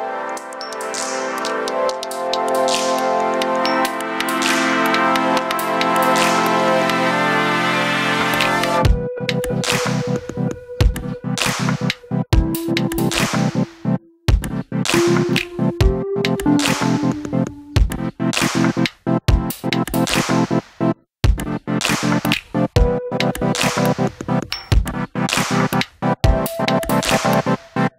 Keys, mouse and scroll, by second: 0.0 shift+a, 4.0-4.8 drag, 6.0 shift+a, 9.3-10.1 drag, 11.3 click, 17.5 4, 19.4-20.8 drag, 21.3 shift+a, 24.4-25.0 drag, 25.5-27.3 drag.